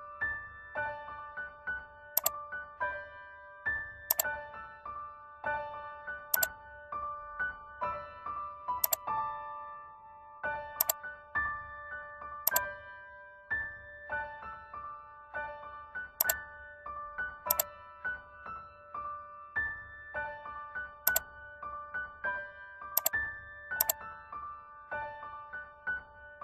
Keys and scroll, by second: 14.7 ctrl+t.